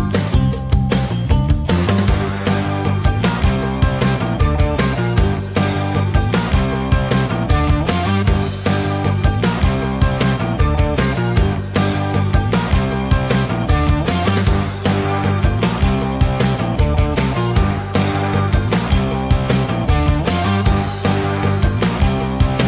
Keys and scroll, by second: 5.3 ctrl+q, 11.1 c.